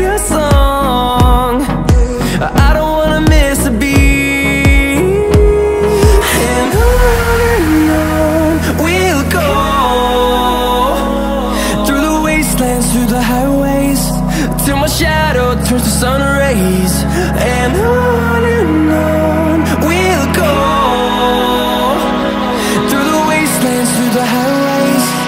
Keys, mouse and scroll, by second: 0.3 middle click, 1.3 middle click, 2.2 click, 2.4 middle click, 3.2 click, 3.4 middle click, 4.0 middle click, 4.3 click, 6.3 middle click, 8.9 click, 9.5 middle click, 10.3 shift+a, 11.2 click, 11.6 s, 12.3 click, 12.7 middle click, 13.0 click, 13.4 shift+a, 14.9 click, 18.0 click, 18.1 middle click, 19.3 0, 20.0 n, 20.7 click, 21.2 n, 22.5 middle click, 22.8 shift+middle click, 23.6 shift+middle click, 23.7 shift+middle click, 24.3 click.